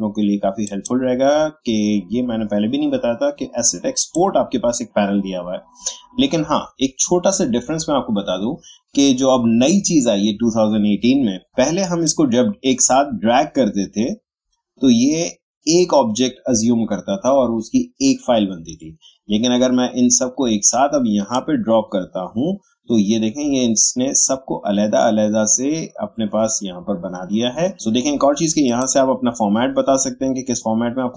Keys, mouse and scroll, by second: 4.0 click, 12.0-22.0 drag, 28.6 click.